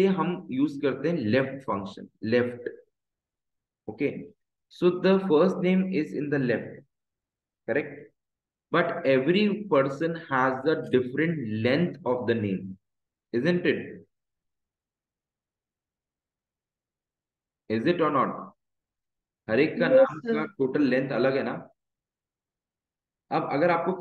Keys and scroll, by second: 4.1 shift+9, 17.1 Escape, 20.6 Left, 21.1 Down, 23.1 Up.